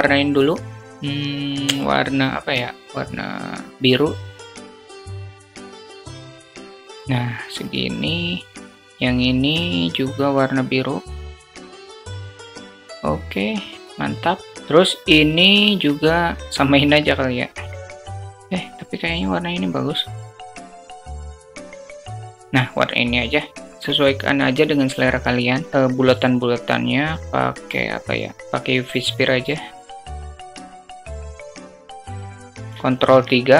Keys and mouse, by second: 1.5 click, 4.8 click, 5.3 click, 7.5 click, 8.6 click, 9.3 click, 10.1 click, 10.1 middle click, 15.0 click, 16.1 click, 23.0 click, 25.7 shift+a, 30.3 click, 31.3 click, 31.8 click, 32.3 ctrl+3, 32.7 alt+middle drag.